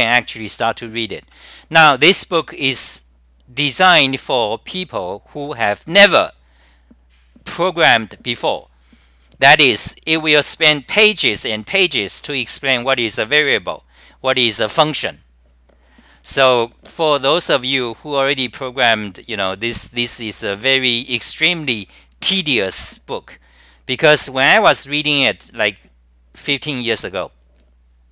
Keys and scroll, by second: 1.0 Tab, 1.0 scroll down 8, 1.2 Tab, 2.8 scroll down 9, 6.0 scroll down 9, 9.0 scroll down 9, 9.0 typing, 12.2 scroll down 9, 15.2 scroll down 9, 15.2 typing, 16.6 scroll down 9, 18.2 scroll down 9, 21.4 scroll down 9, 22.8 scroll down 9, 24.4 scroll down 9, 24.4 typing, 27.6 scroll down 9, 27.6 typing.